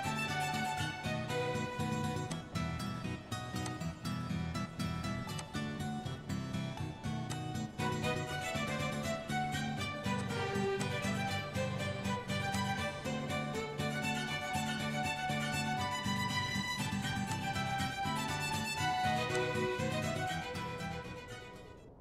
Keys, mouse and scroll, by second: 2.4-3.7 drag, 6.2 click, 7.3 click, 10.2 click, 10.9 click, 14.8 click, 15.8 middle click, 17.4 click, 20.3 click, 21.2 click.